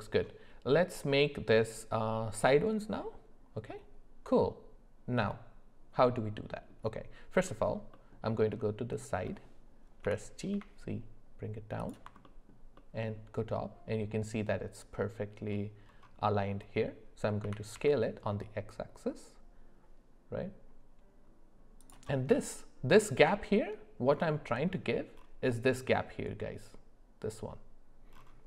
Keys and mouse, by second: 5.3-6.7 middle drag, 7.9 alt+middle click, 10.0 g, 12.2 alt+middle click, 12.7 alt+middle click, 17.4 s.